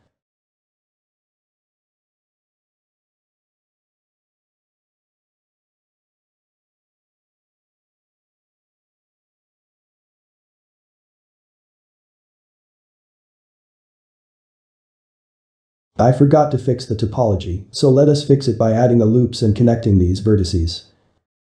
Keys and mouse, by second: 0.5 middle click, 1.1 click, 2.2 click, 2.8 click, 3.6 shift+click, 4.3 1, 4.8-10.6 middle drag, 10.6 click, 10.9 middle click, 11.4 g, 13.4 middle click, 13.9 click, 14.6 click, 14.9-21.4 middle drag.